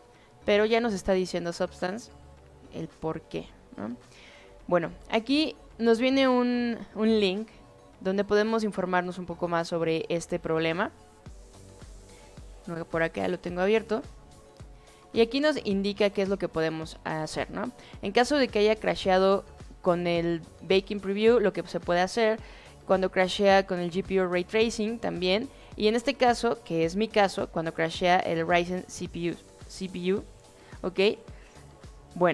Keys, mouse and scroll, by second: 3.4 click, 11.5 click, 12.6 click, 13.7 click, 20.6-21.1 drag, 21.4 click, 26.4 click, 31.1 click.